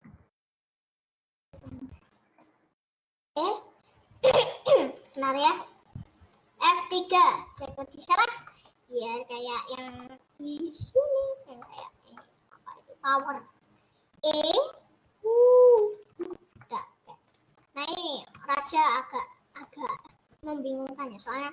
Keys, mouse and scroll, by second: 0.0 s, 2.7 click, 3.3-5.0 middle drag, 5.0 click, 5.7-8.3 middle drag, 8.3 F3, 8.7 middle click, 9.1-9.6 scroll down 2, 9.9 middle click, 10.2-10.6 scroll down 4, 11.7 middle click, 11.9 scroll up 2, 12.7 middle click, 13.6-14.2 scroll up 3, 14.2 e, 16.4 middle click, 17.6 middle click, 18.2 scroll up 2, 18.4 shift+middle click, 18.8 scroll down 1, 19.0-21.5 middle drag.